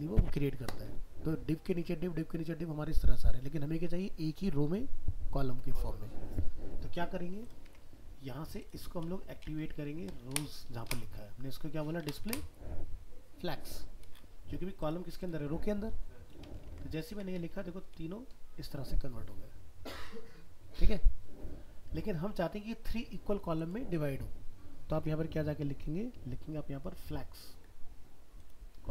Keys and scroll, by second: 7.7 alt+Tab, 16.7 ctrl+s, 17.1 alt+Tab, 24.9 alt+Tab.